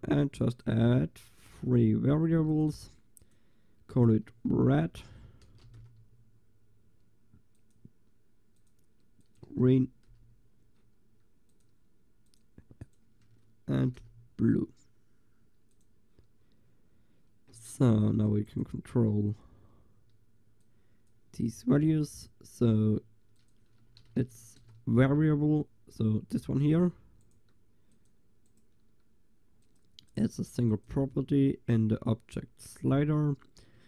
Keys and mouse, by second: 8.6-15.0 drag, 18.1-20.1 middle drag, 18.5-20.1 drag, 20.1 right click, 20.7-25.7 drag, 26.7-33.8 drag.